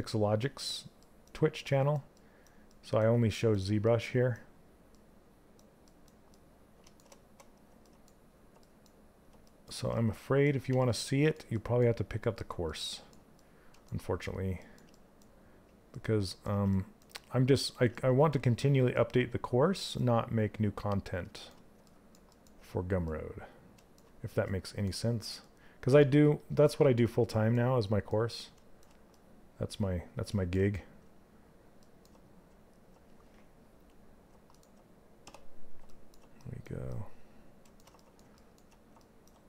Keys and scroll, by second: 34.7 d.